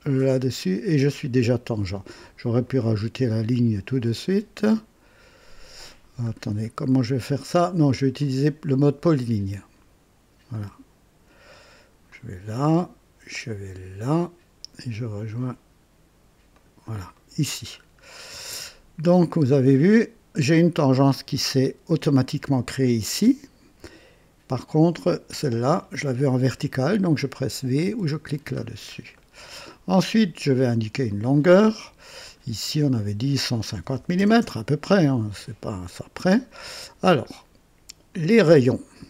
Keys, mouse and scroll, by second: 0.2 click, 2.5 click, 4.1 click, 6.3-6.7 scroll down 2, 6.9 right click, 8.2 click, 10.5 click, 12.1 click, 14.1 click, 16.5 click, 17.1 right click, 17.7 scroll up 2, 18.2 right click, 19.1 scroll up 2, 22.8 right click, 22.8 click, 24.5 click, 27.8 v, 28.6-28.9 scroll down 1, 29.1-29.9 right drag, 31.1 click, 32.3 click, 33.7 KP_1, 33.9 KP_5, 34.1 KP_0, 34.4 Return, 38.1 click.